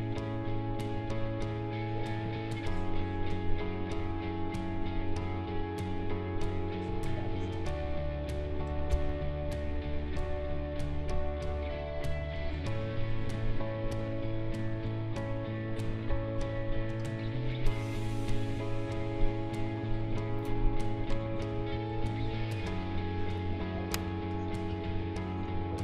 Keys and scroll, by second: 8.9 ctrl+z, 16.1 q, 21.1 Delete.